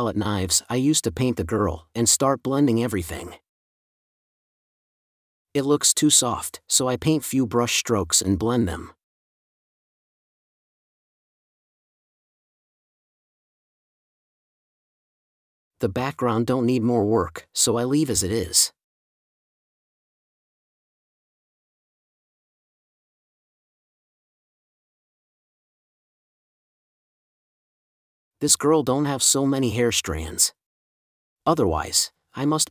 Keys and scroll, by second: 0.1 super+e, 0.2 super+s, 1.9 4, 7.1 space, 13.7 space, 14.9 space, 15.5 4, 17.9 space, 20.1 space, 21.4 super+space, 23.1 super+s, 31.6 space.